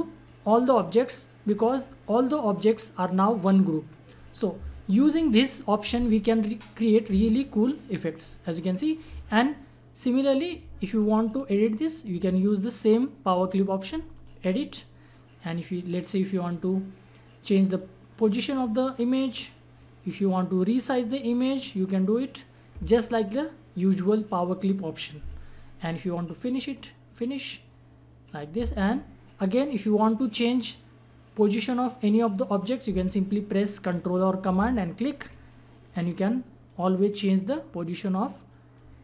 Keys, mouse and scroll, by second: 4.2 click, 14.1-17.4 drag, 17.5-25.1 drag, 26.8 click, 34.6 ctrl+Num_Lock, 34.6 click, 34.9 ctrl+click, 36.6-37.2 drag.